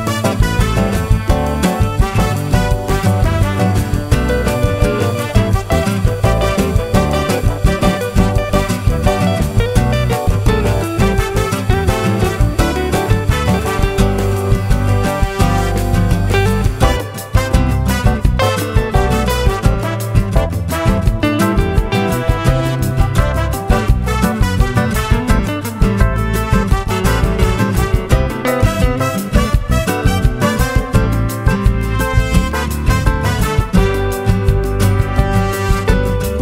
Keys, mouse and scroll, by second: 1.1-3.1 shift+drag, 3.5-8.2 shift+drag, 8.4 shift+middle click, 11.8-13.2 drag, 15.0 shift+click, 16.0 ctrl+shift+z, 16.5-17.7 ctrl+shift+drag, 19.9 shift+click, 20.4 shift+click, 21.0 shift+click, 22.5 shift+click, 24.6 shift+click, 25.2 ctrl+shift+z, 25.9 ctrl+shift+z, 26.6 shift+click, 27.6 ctrl+shift+z, 28.0 ctrl+shift+click, 29.7 ctrl+shift+z, 30.1 ctrl+shift+click, 31.1 shift+click, 31.9-33.2 shift+drag, 33.3 ctrl+shift+z, 34.8 KP_Add, 35.7 KP_Add, 35.9 click.